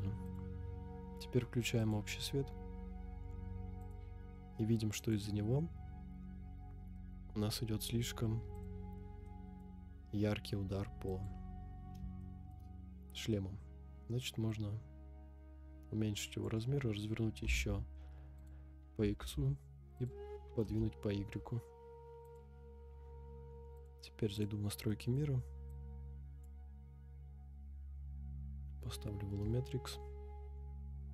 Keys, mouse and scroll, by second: 0.2 click, 1.8 click, 3.8 click, 5.0 click, 7.0-7.4 middle drag, 7.5 scroll down 4, 8.5 click, 9.0 scroll down 2, 9.2-9.6 middle drag, 11.1 click, 12.2-12.5 shift+middle drag, 12.7 scroll up 2, 13.1 middle click, 14.5-16.6 drag, 17.4 r, 17.5 x, 18.5 click, 19.2 g, 19.3 y, 20.1 click, 20.6 KP_0, 22.2 click, 23.7 shift+middle click, 23.7 scroll down 1, 23.7-24.4 drag, 24.9 middle click, 25.8-26.6 drag, 29.9 scroll down 1.